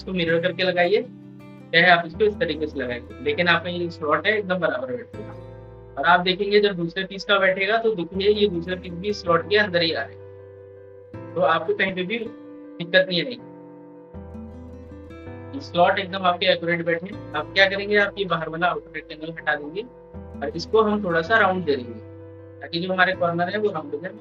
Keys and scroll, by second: 11.7 ctrl+z, 12.5 ctrl+z, 13.7 ctrl+z, 14.2 ctrl+z.